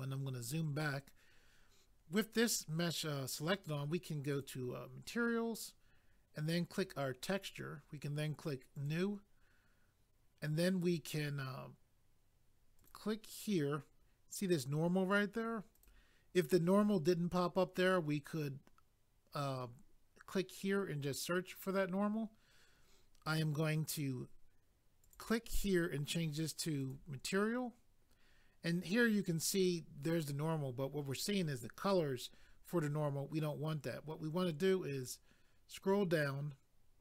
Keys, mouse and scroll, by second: 4.3 click, 4.4 click, 6.7 click, 6.9 click, 8.7 click, 8.8 click, 12.8 click, 12.9 click, 15.7 click, 15.8 click, 25.0 click, 26.8 click, 35.0 click.